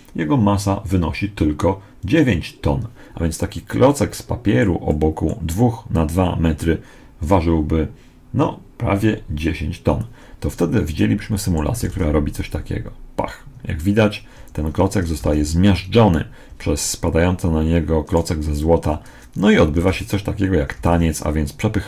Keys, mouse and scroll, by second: 3.8-12.2 middle drag, 11.8 alt+a, 14.2 Escape, 15.1 alt+a, 16.4 Escape, 18.5-19.8 right drag, 19.6 alt+a.